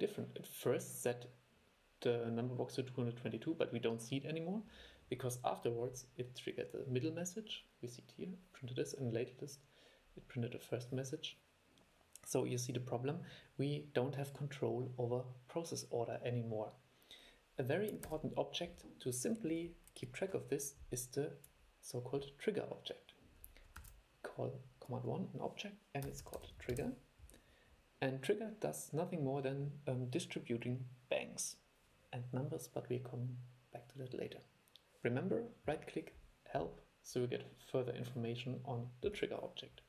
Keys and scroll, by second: 18.2 super+e, 24.0 super+1.